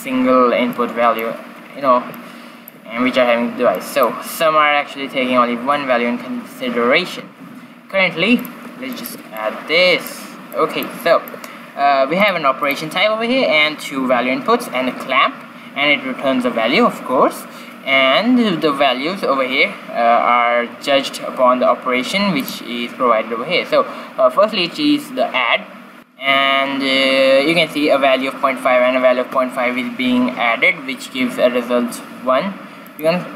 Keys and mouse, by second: 0.7-4.2 middle drag, 8.3-10.4 drag, 10.8-12.6 drag, 12.8-13.8 drag, 22.3-24.3 drag, 32.8-33.3 drag.